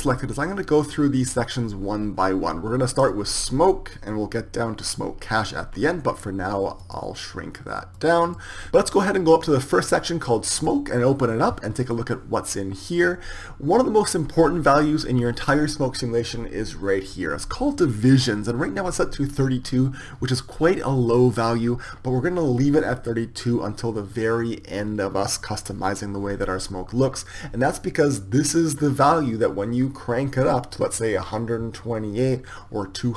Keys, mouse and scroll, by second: 3.7-5.1 drag, 7.9 click, 10.0-33.1 drag.